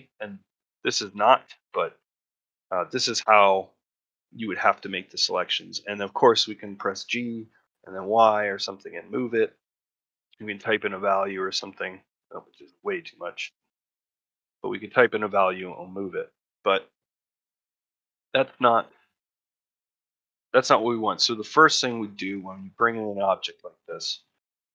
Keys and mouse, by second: 0.9 middle click, 1.4 shift+middle click, 1.9 ctrl+middle click, 2.3 shift+middle click, 2.6 middle click, 4.7 middle click, 18.2 middle click, 18.6 shift+middle click, 19.0 middle click, 19.3 shift+middle click, 19.7 middle click, 20.3 ctrl+middle click, 20.9 middle click, 21.2 shift+middle click, 21.6 middle click, 21.9 shift+middle click, 22.3 ctrl+middle click, 22.5 middle click, 24.0 shift+middle click, 24.5 a.